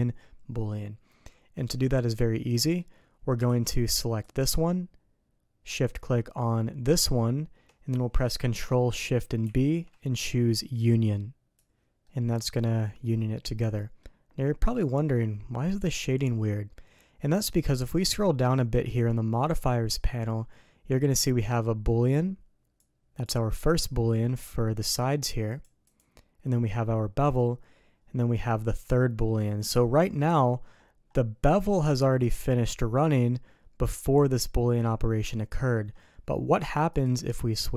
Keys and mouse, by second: 1.2-2.0 middle drag, 2.6 middle click, 3.4 alt+a, 4.2 click, 9.4 ctrl+shift+b, 12.0-13.9 drag, 14.6-15.8 drag, 18.9 click, 22.7 click, 24.2 click, 25.5 click, 25.8 click, 36.9 click.